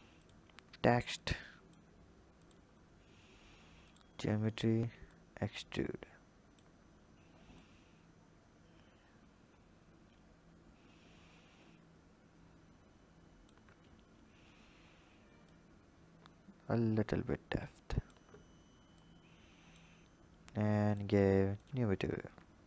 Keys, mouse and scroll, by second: 0.0 click, 0.3-1.0 scroll down 6, 1.0 click, 2.2 click, 2.6-3.6 scroll up 3, 3.7-7.5 drag, 15.2-18.3 drag, 18.7 click, 20.6 drag, 21.3 click, 21.9-22.6 scroll down 9.